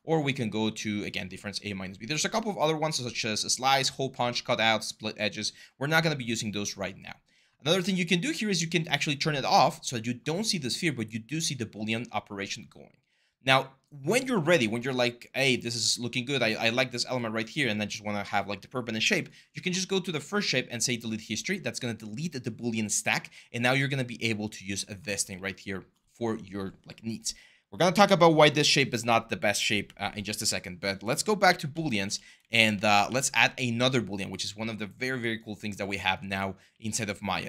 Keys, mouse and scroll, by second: 24.8 ctrl+z, 31.2 ctrl+z, 31.5 ctrl+z, 31.8 ctrl+z, 32.8 ctrl+z, 36.0 w, 36.5 r.